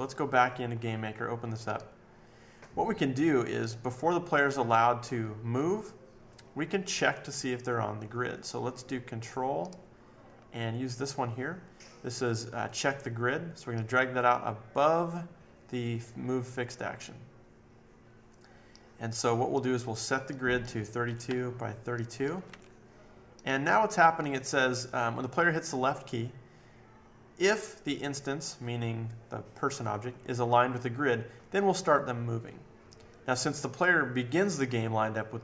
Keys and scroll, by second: 21.0-23.0 typing.